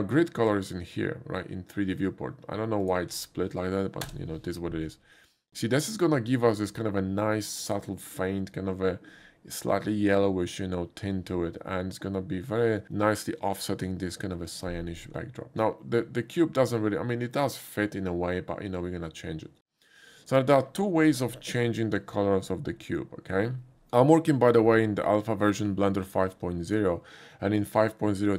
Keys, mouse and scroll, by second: 0.4 click, 2.8 click, 3.2 ctrl+v, 4.0 Return, 6.5-7.7 drag, 12.1-20.3 drag, 24.4 click.